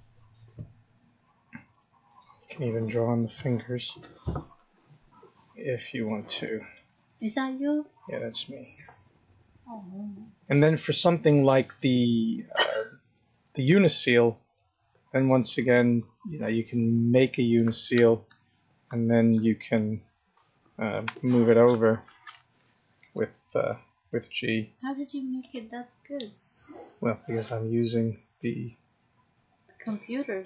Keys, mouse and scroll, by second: 1.0 click, 3.3 click, 4.8 click, 5.9 click, 6.8 click, 7.8 click, 9.3 click, 13.1 click, 14.9 click.